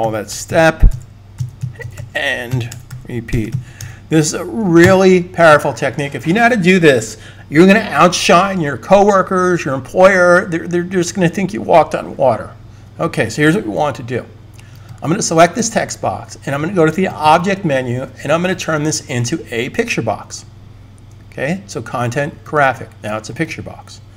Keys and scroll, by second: 0.0-4.2 typing.